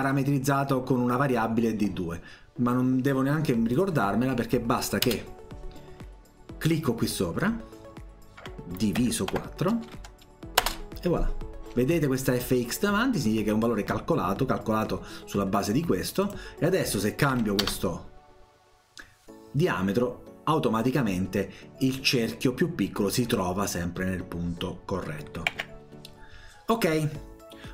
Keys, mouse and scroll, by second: 3.8 click, 3.9 click, 5.1 BackSpace, 6.7 click, 9.3 4, 10.6 Return, 16.1 click, 27.3-27.7 scroll down 2.